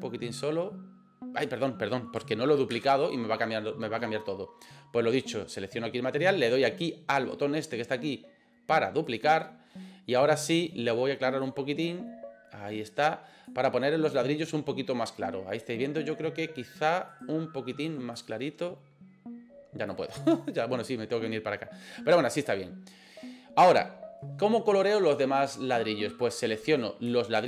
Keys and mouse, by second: 2.8 ctrl+z, 9.1 click, 10.5 click, 14.1 right click, 17.1 right click, 22.3 right click, 26.7 right click.